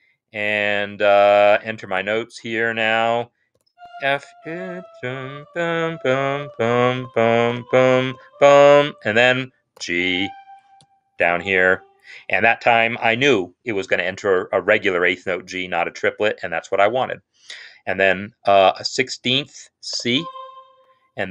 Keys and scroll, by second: 2.9-8.0 typing, 9.6 typing, 10.9 ctrl+Down, 18.7 typing, 19.9 typing.